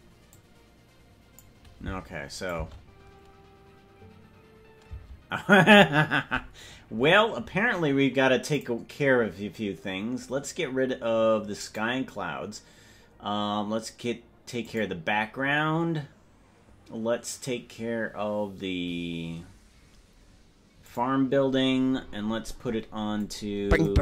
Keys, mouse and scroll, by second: 0.3-1.5 drag, 2.5 click, 2.8 space, 5.2 space, 8.5 click, 12.1 click, 15.2 click, 21.2 click, 23.2 click, 23.7 click.